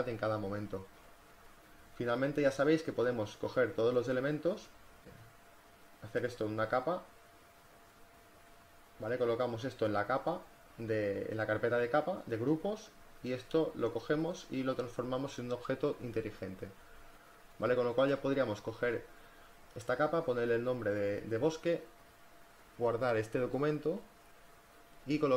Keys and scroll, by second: 0.7 v, 16.5 v, 19.0-20.5 typing.